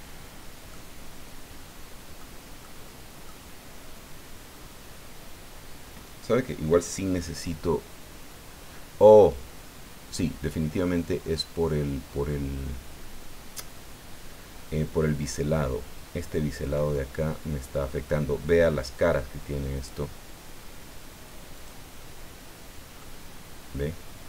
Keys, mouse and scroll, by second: 0.7-2.3 drag, 2.6 click, 21.6 click, 23.0-24.2 drag.